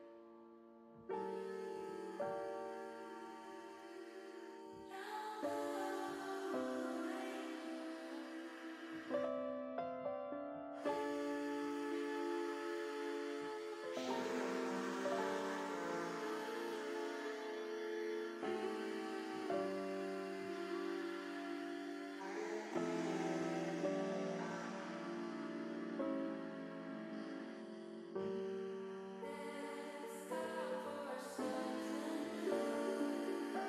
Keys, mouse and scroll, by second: 0.7 s, 1.2 y, 2.4 click, 3.2 middle click, 4.6 middle click, 8.0 KP_1, 9.1 middle click, 12.8 shift+click, 13.6 middle click, 14.8 middle click, 15.7 shift+click, 16.1-17.1 middle drag, 18.1 middle click, 18.7 middle click, 21.5 click, 22.6 ctrl+z, 22.9 click, 23.3 middle click, 24.8 click, 25.1 middle click, 27.4-28.4 middle drag, 31.0 click, 32.0 ctrl+z, 32.4 middle click, 33.3 click.